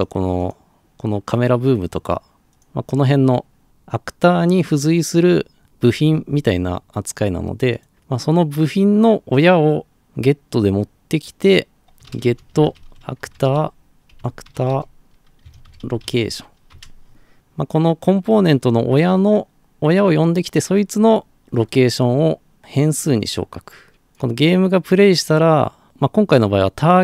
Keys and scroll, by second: 11.9-16.6 typing, 16.8 Return.